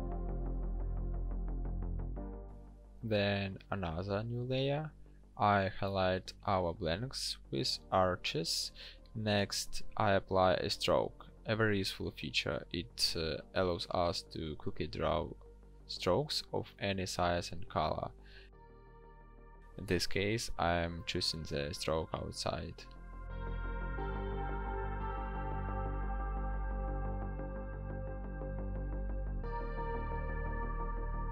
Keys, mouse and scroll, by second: 4.1 ctrl+shift+n, 6.5 ctrl+click.